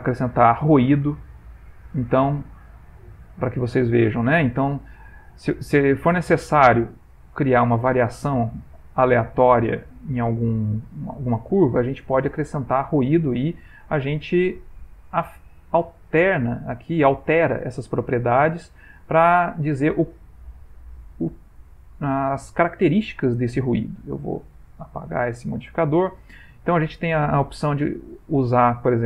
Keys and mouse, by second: 3.2 click, 14.2 click, 16.9 click, 21.0 click, 24.6 click, 25.9 click.